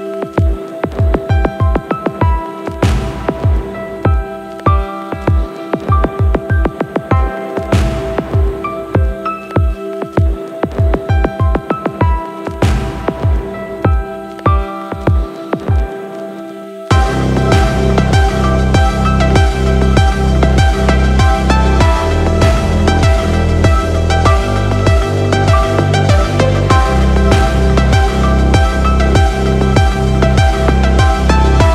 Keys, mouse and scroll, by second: 5.0 click, 5.7-7.3 drag, 8.4 click, 8.5-10.9 drag, 12.6 n, 13.5 click, 13.7 n, 14.4-15.4 scroll down 6, 15.7 middle click, 18.9 scroll down 1, 20.2 middle click, 20.9 shift+middle drag, 22.1 middle click, 23.5 shift+middle click, 24.8 middle click, 26.2 shift+middle click, 28.8-29.3 scroll up 2, 29.7 scroll down 1, 30.5 shift+middle click.